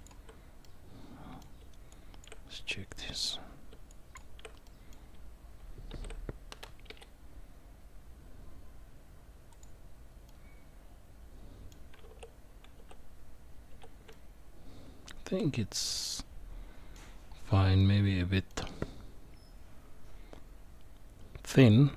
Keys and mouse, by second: 0.6 middle click, 1.9 shift+click, 3.9 shift+click, 4.6 middle click, 5.9 shift+d, 10.3-11.7 middle drag, 12.0 ctrl+z, 12.8 ctrl+z, 13.7 ctrl+z, 14.1-16.9 middle drag, 17.8 middle click.